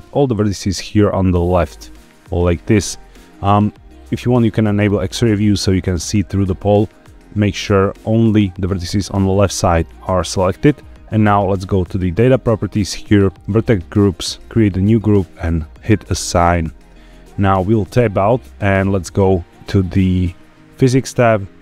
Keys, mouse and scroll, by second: 0.9-2.3 drag, 4.8 click, 14.2 click, 16.3 click, 17.6 Tab, 20.1 click.